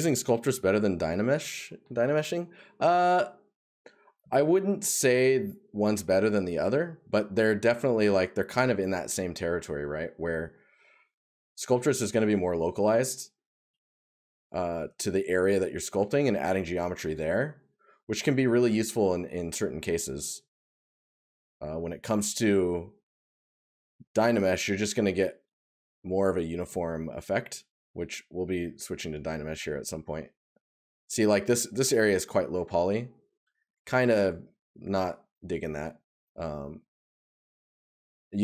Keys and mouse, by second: 3.6 right click, 7.5 right click, 11.4 right click, 13.2 right click, 16.4 right click, 17.7 right click, 20.5 right click, 26.1 right click, 28.1 right click, 31.3 right click, 38.0 right click.